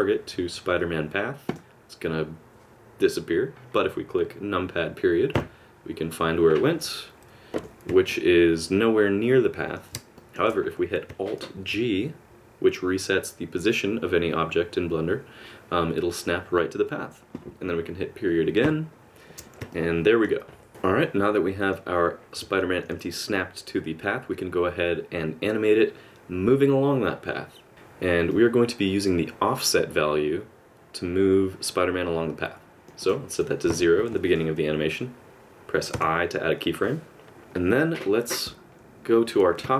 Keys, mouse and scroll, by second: 5.3 KP_Decimal, 6.8-7.6 KP_Subtract, 8.1 middle click, 10.2 shift+middle click, 11.6 alt+g, 18.6 KP_Decimal, 19.7 middle click.